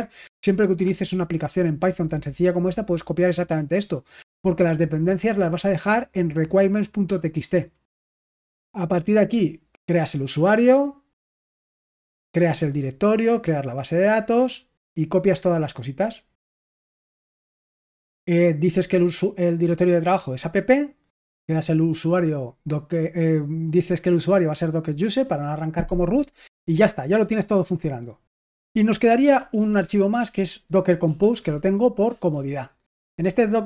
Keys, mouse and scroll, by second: 8.0-8.6 scroll down 1, 8.6 click, 9.5 click, 9.8 click, 12.8 click, 14.1-18.6 scroll down 1, 18.6 click, 18.8 click, 21.5 click, 23.8 click, 24.1 click, 24.7 click, 25.0 click, 28.2 click, 28.9-31.0 typing, 31.3 Tab, 32.0 Return.